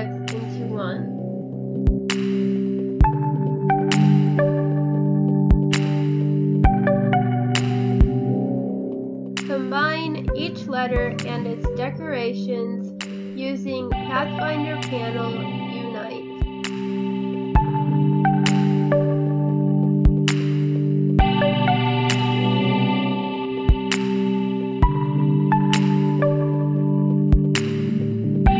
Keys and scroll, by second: 1.5 space, 3.0 space, 5.8 space, 6.2 space, 12.3 space, 13.5 space, 14.4 space, 15.4 space, 17.6 ctrl+z, 21.7 ctrl+z.